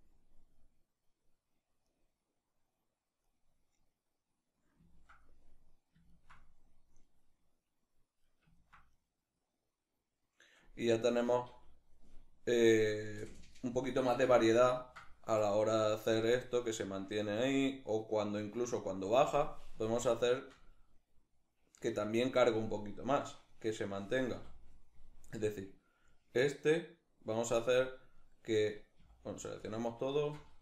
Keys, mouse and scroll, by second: 4.5 ctrl+middle click, 7.1 middle click, 9.3-12.4 middle drag, 12.4 click, 12.8 q, 13.9 a, 14.5-15.0 ctrl+middle drag, 15.0-23.2 drag, 21.5 Escape, 23.2-23.9 right drag, 24.0 a, 25.2-27.5 drag, 27.5 right click, 28.6 a, 29.5 alt+shift+right click.